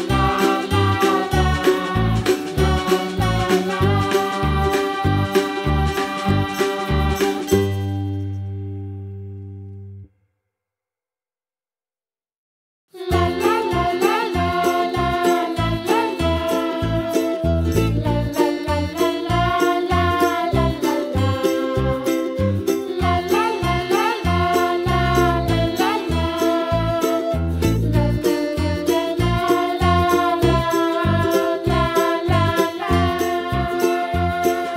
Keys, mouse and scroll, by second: 0.2 shift+click, 0.5 shift+click, 1.0 shift+click, 1.2 shift+click, 1.4 middle click, 1.9 shift+click, 2.1 shift+click, 2.4 scroll down 1, 2.7 shift+click, 2.8 middle click, 3.3 shift+click, 3.4 shift+middle click, 4.1 shift+click, 4.3-5.5 middle drag, 5.5 shift+click, 5.6 middle click, 6.1 shift+click, 6.2 middle click, 6.7 shift+click, 6.9 shift+click, 7.2 shift+click, 7.6 shift+click, 7.8 middle click, 8.1 shift+click, 8.7 shift+click, 8.9 middle click, 9.4 shift+click, 9.6 middle click, 10.3 shift+click, 10.6 shift+click, 11.3-12.4 middle drag, 12.4 g, 15.0 scroll down 1, 15.2 middle click, 15.7 Tab, 16.0-17.0 middle drag, 17.0-17.5 scroll down 2, 17.5-17.8 scroll up 4, 17.8 middle click, 18.2 Tab, 18.4 click, 20.3 middle click, 20.7 click, 21.5 3, 21.8 click, 22.5 e, 23.2 middle click, 23.6 typing, 23.9 click, 24.3 alt+click, 24.8 g, 26.0 middle click, 26.3 click, 27.0 Tab, 27.6 shift+d, 29.6 click, 29.8 scroll up 2, 30.0 middle click, 30.5 Tab, 31.1 3, 31.2 click, 31.5 shift+click, 31.7 middle click, 32.2 e, 34.4 scroll down 2, 34.5 middle click.